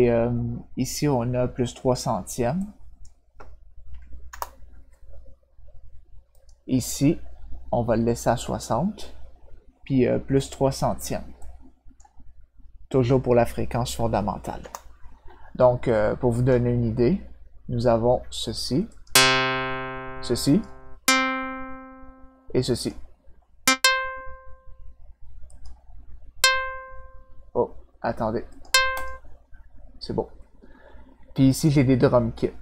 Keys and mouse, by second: 2.6 click, 6.3 click, 11.4 click, 14.6 Return, 16.3 click, 18.8 click, 20.4 click, 22.7 click, 25.4 click, 28.5 click, 28.9 click, 31.4 click.